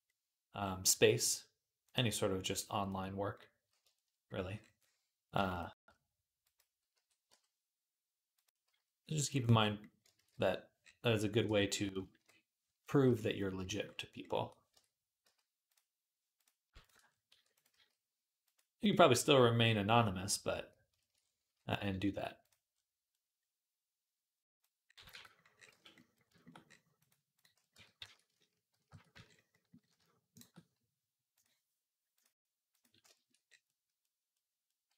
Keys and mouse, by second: 1.7-6.4 drag, 5.2 e, 5.5 s, 6.4-8.5 middle drag, 6.7 g, 8.5 s, 10.0 ctrl+z, 11.0-13.6 middle drag, 11.3 Tab, 12.0 KP_3, 13.7 middle click, 13.9-17.2 shift+middle drag, 14.5 Tab, 15.0 z, 17.1 e, 17.5 s, 19.6-21.1 middle drag, 21.2-23.9 middle drag, 21.3 q, 23.9-27.9 drag, 23.9 right click, 25.0 Tab, 25.6 z, 26.9-27.9 middle drag, 26.9-27.9 right drag, 27.6 Tab, 27.8 a, 28.6 shift+n, 28.9 Tab, 30.2-33.5 shift+right drag, 31.2 click, 31.2 middle click, 32.1-33.5 drag, 32.1-34.6 middle drag.